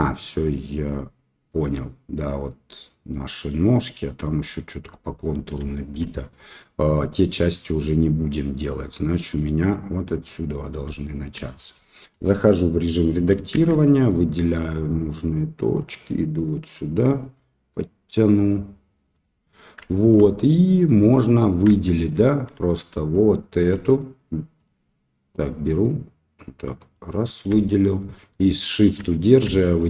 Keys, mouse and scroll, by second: 5.7 shift+middle drag, 8.9-10.2 drag, 11.0 shift+middle click, 12.1 Tab, 13.5 shift+z, 14.2 click, 15.7-19.1 drag, 19.8 shift+middle click, 21.8 shift+middle click, 23.2 shift+click, 24.5 click, 25.3-26.9 drag, 27.6 shift+middle click, 28.1 shift+middle click, 28.5 shift+middle click, 29.5 shift+middle click.